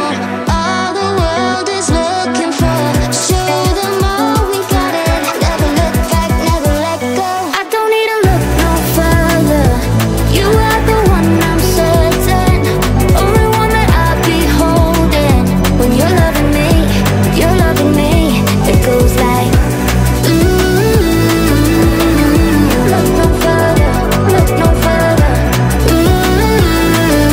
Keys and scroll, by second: 4.3 o.